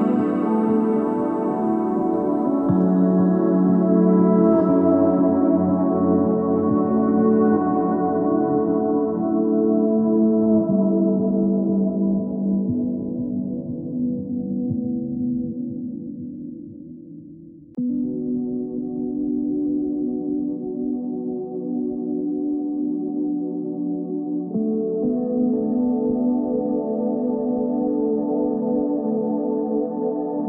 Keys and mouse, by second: 0.1 middle click, 0.6 KP_3, 0.9 z, 1.1 c, 3.6 z, 4.1 Tab, 7.3 middle click, 8.5 KP_3, 9.2 KP_1, 9.8 middle click, 10.0 z, 12.5 shift+a, 13.3 s, 15.6 s, 17.2 Tab.